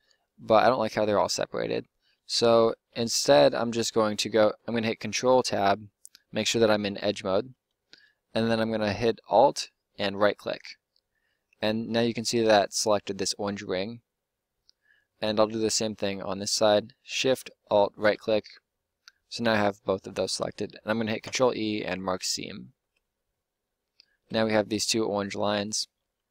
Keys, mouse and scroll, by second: 1.3 Tab, 4.3 ctrl+Tab, 10.8 middle click, 11.3 middle click, 11.5 middle click, 11.7 middle click, 14.1 middle click, 14.3 middle click, 17.9-19.3 right drag, 21.1 ctrl+e, 22.8 Tab, 23.3 Tab, 24.1 Tab, 24.8 Tab.